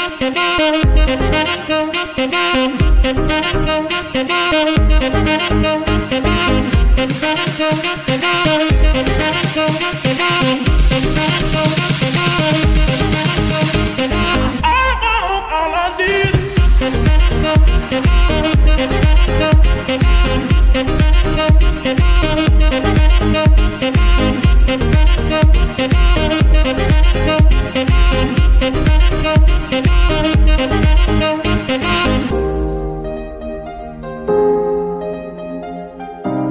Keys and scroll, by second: 0.8 Escape, 5.3 shift+8, 5.8 KP_0, 5.8 KP_Decimal, 7.7 KP_5, 8.0 Return, 10.0 g, 12.0 Escape, 15.8 shift+8, 16.2 shift+KP_4, 16.4 shift+Return, 19.0 r, 19.1 x, 21.2 Escape, 22.1 g, 22.3 y, 29.7 Escape, 31.5 g, 31.7 x, 32.9 Escape, 34.1 shift+g.